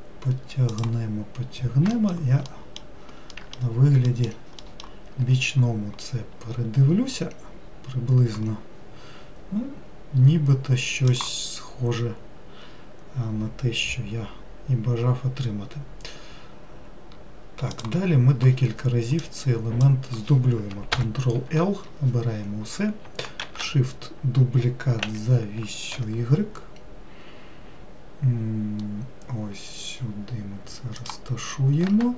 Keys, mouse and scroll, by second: 2.2 alt+middle click, 2.7 alt+middle click, 3.6 alt+middle click, 4.3 alt+middle click, 4.9 alt+middle click, 7.7-8.9 scroll down 3, 19.5-21.2 drag, 21.2 ctrl+l, 23.7 shift+d, 31.8-32.1 scroll down 2.